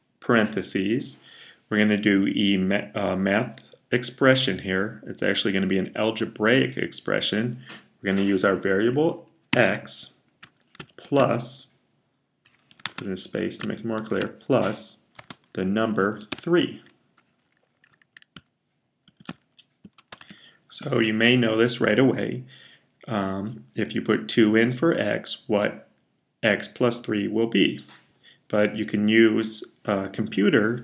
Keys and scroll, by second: 9.1-9.9 typing, 10.9 typing, 12.3-13.8 typing, 15.9-16.7 typing, 18.9 typing, 20.1 typing.